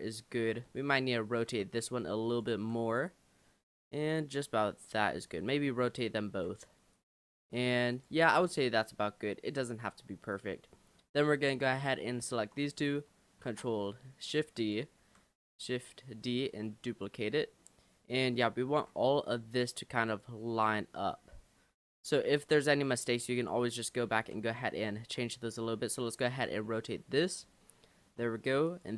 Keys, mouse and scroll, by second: 0.8 l, 1.5 r, 2.6 g, 5.3 l, 6.3 r, 7.4 g, 8.3 scroll down 3, 8.5-10.3 middle drag, 10.3 click, 10.7-11.4 scroll up 5, 11.8-13.5 shift+middle drag, 13.5 shift+d, 15.0 g, 18.8 r, 21.7 g, 23.4 click, 25.0 r, 26.4 g, 27.6-28.7 shift+middle drag, 28.7 click.